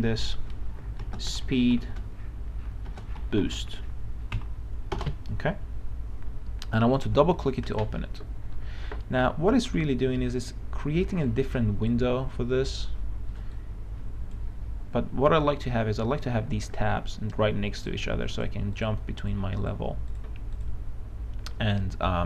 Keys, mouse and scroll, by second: 1.1-4.6 typing, 5.0 shift+Return, 7.8-22.2 drag.